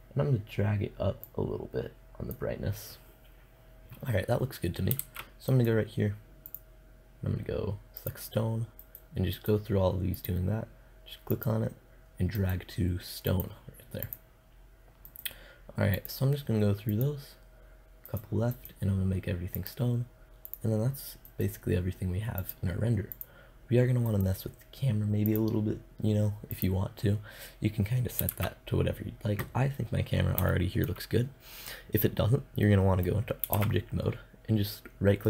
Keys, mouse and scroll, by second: 4.5 shift+z, 5.9 middle click, 8.3 right click, 12.7-17.5 middle drag, 17.5 right click, 26.6-27.7 middle drag, 27.7 shift+z, 32.0 middle click, 33.0 shift+z, 34.0 right click.